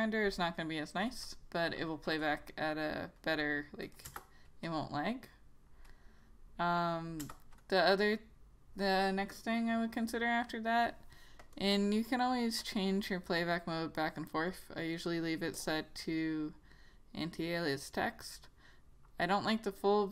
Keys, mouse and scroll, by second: 4.2 click, 4.5 Return, 7.3 Return, 11.7 click.